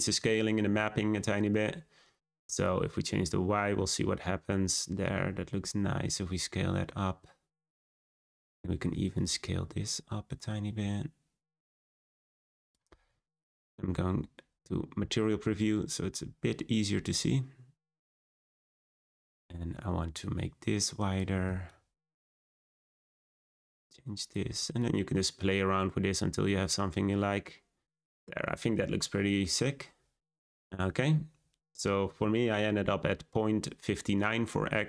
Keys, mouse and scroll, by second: 3.1-5.6 drag, 9.1-12.6 shift+drag, 13.7 z, 16.7 scroll up 1, 18.9-28.2 shift+drag, 28.2-29.4 scroll down 2.